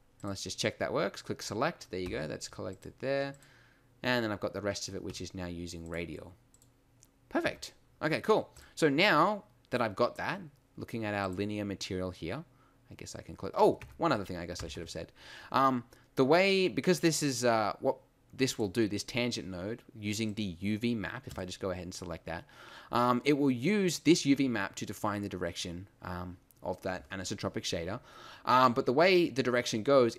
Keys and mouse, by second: 0.8-2.1 middle drag, 2.1 a, 4.3 middle click, 5.1 a, 7.4 Tab, 13.8 Tab, 14.6 a, 14.7 a.